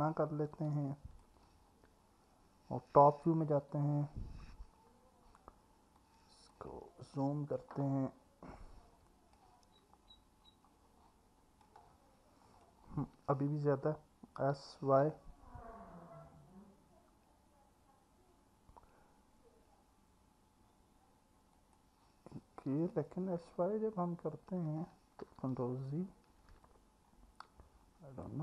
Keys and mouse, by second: 0.7 alt+middle click, 3.6 KP_7, 6.0 click, 8.7 click, 11.6-12.6 drag, 14.6 s, 15.1 u, 22.9 alt+middle click, 25.6 ctrl+z, 26.6-28.2 alt+middle drag.